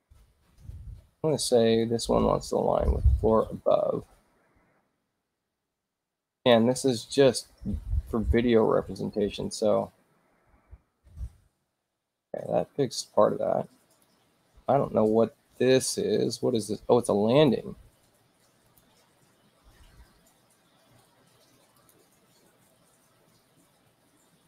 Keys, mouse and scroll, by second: 0.3 shift+u, 1.1 shift+i, 1.8 click, 3.4 click, 5.2 shift+i, 6.4 click, 8.8 shift+u, 10.3 click, 13.9 click, 17.3 click, 18.6 click, 21.8 click.